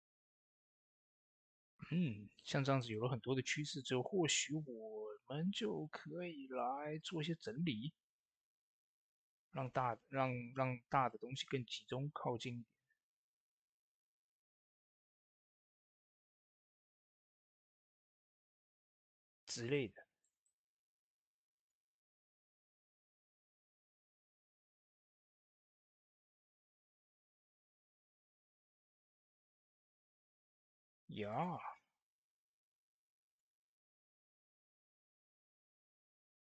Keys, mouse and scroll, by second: 0.9 ctrl+s, 4.6-10.4 drag, 14.7 click, 14.7 typing, 14.8 Tab, 15.9 click, 16.8 scroll down 1, 17.1 middle click, 18.3 scroll up 1, 18.8 middle click, 19.2 Tab, 19.6 click, 19.9 typing, 20.3 middle click, 21.4 click, 22.4-28.2 drag, 27.1 typing, 28.2 Tab, 28.6-36.4 drag.